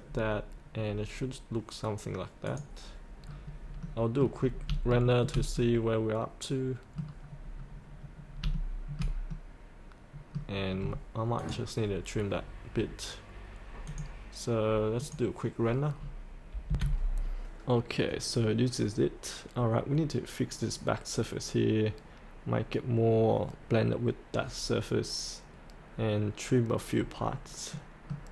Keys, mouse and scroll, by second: 0.0 scroll up 1, 2.4 click, 3.2-3.8 scroll up 1, 3.8 middle click, 4.5 scroll up 1, 4.9 shift+middle click, 5.6-7.1 middle drag, 7.3-8.0 scroll down 1, 8.5 shift+middle click, 9.3-11.0 middle drag, 11.4 click, 16.7 F8, 26.9-27.9 scroll up 1, 27.9 middle click.